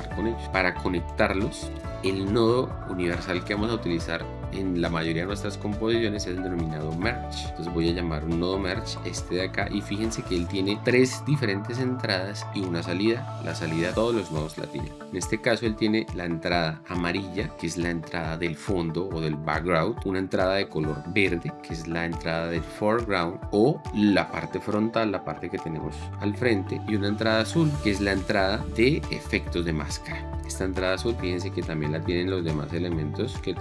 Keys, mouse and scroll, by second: 10.2 click.